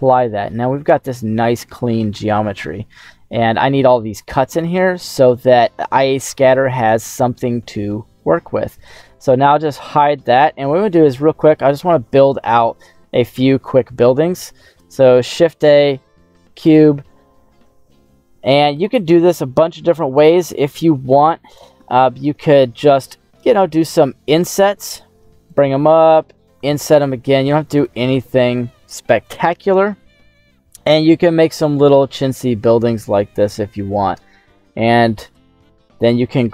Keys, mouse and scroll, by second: 0.1 middle click, 0.6 scroll up 2, 0.9-2.3 middle drag, 2.9 scroll down 2, 5.6 middle click, 7.3 Tab, 8.7 right click, 9.6 h, 14.6 shift+a, 17.6 s, 18.7 click, 19.1-19.5 scroll up 2, 19.5 scroll down 1, 19.7 scroll down 1, 21.0 Tab, 21.4 right click, 22.8 right click, 23.5 i, 24.4 click, 24.7 e, 25.4 click, 26.5 i, 27.7 click, 28.0 e, 29.2 click, 29.7 middle click, 32.9 right click, 33.7 middle click, 34.5 shift+right click, 35.4 middle click, 36.1-36.4 scroll down 3.